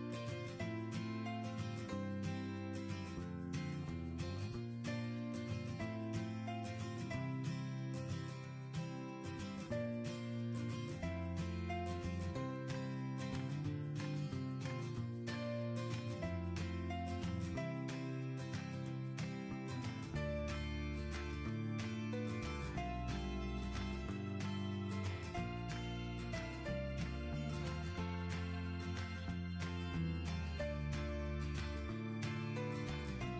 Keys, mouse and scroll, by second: 26.0-26.5 typing, 28.0-28.9 typing.